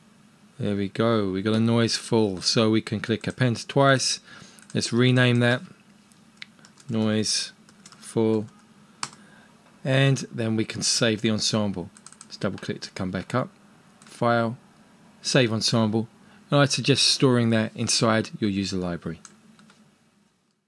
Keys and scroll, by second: 6.6-9.1 typing.